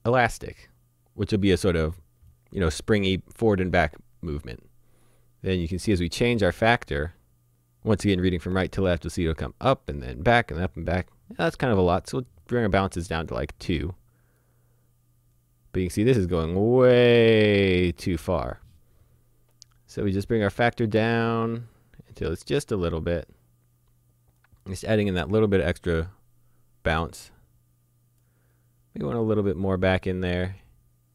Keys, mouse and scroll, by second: 0.0 click, 5.0 click, 12.5 click, 14.4 click, 20.6 click, 25.8 click, 30.0 click.